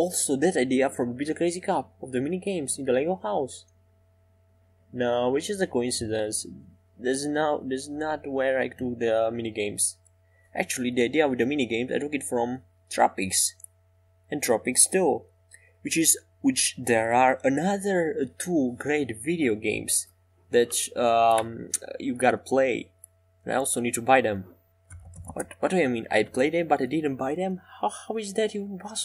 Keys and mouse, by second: 3.1 Tab, 3.6 right click, 5.8-7.7 right drag, 9.7 middle click, 10.3-14.0 middle drag, 14.1 right click, 14.6-17.3 middle drag, 17.3 e, 20.2 e, 20.5 s, 24.5-28.4 middle drag, 28.4-29.0 right drag.